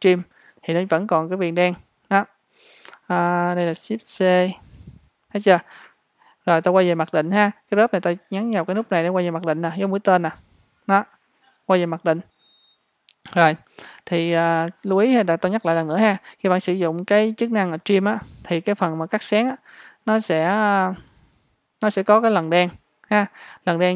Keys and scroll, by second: 4.5 shift+c.